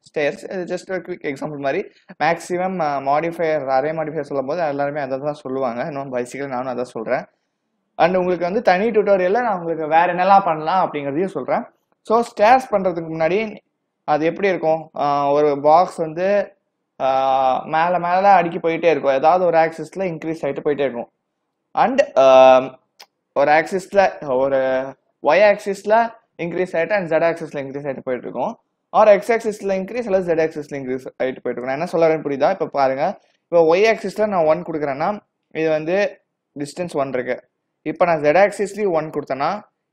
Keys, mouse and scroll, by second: 0.2 click, 3.9 click, 13.4 click, 30.0 click, 32.9 click, 38.1 click.